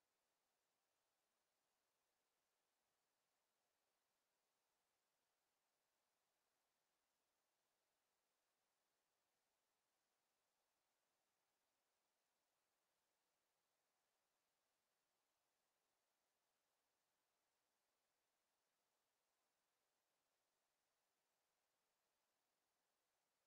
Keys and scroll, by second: 18.8 w, 20.4 space, 21.0 w.